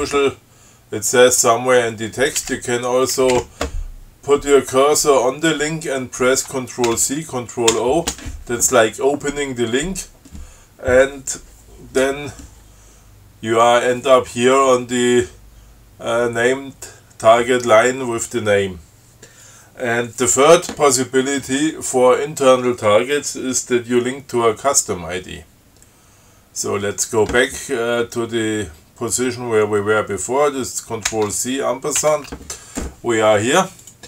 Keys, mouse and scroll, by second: 2.6 Left, 3.4 Left, 7.1 ctrl+c, 8.0 ctrl+o, 31.3 ctrl+c, 32.2 shift+6.